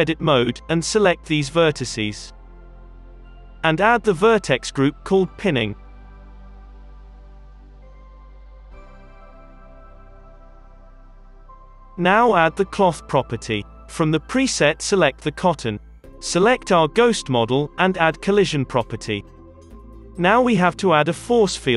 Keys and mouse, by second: 6.2 n, 6.3 Return, 7.7 Tab, 8.4 alt+a, 9.5 KP_3, 9.7 KP_Decimal, 10.4 g, 15.6 shift+a, 15.7-17.0 drag, 17.2-21.1 drag, 19.8 KP_3, 20.4 shift+a.